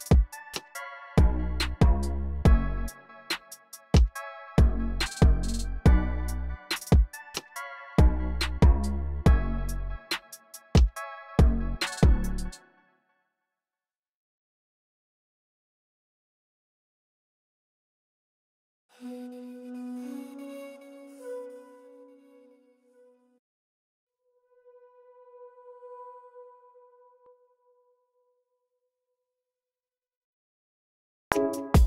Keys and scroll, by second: 5.4 super+Tab, 6.3 super+Tab, 7.1 super+Tab, 7.8 super+Tab, 12.2 space, 16.1 v, 17.7 super+k, 17.9-21.7 typing, 23.6 super+k, 23.9-24.8 typing, 26.5 super+k, 26.5-27.5 typing, 29.1 u, 31.0 r, 31.5 super+k.